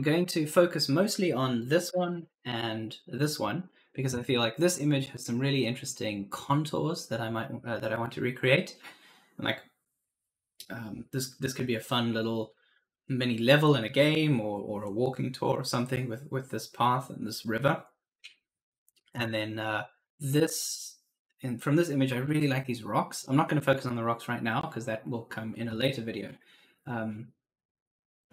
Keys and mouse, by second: 1.7 Left, 19.0 Right.